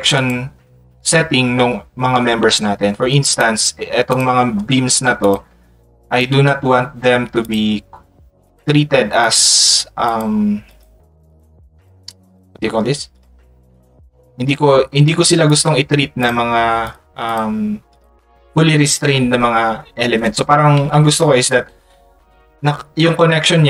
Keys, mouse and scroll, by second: 3.3 click, 4.1 click, 6.1 click, 7.4 click, 8.4 click, 9.2 click.